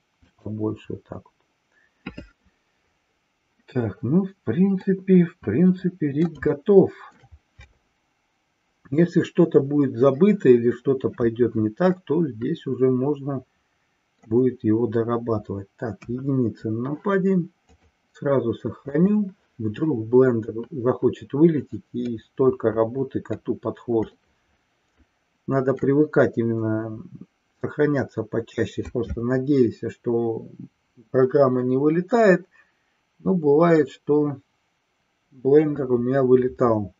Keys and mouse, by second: 4.9-7.2 middle drag, 11.9-14.2 middle drag, 16.0 KP_1, 17.6-19.2 drag, 22.0-23.5 middle drag, 24.1-26.0 shift+middle drag.